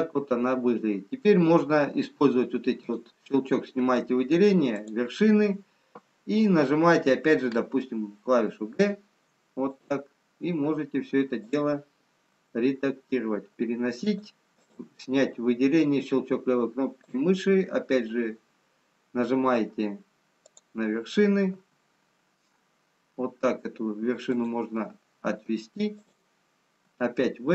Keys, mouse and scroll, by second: 0.5 scroll down 2, 2.7 click, 8.6 g, 11.8 click, 12.2 g, 14.6 click, 20.4 click, 21.5 g, 25.8 click, 26.7 g.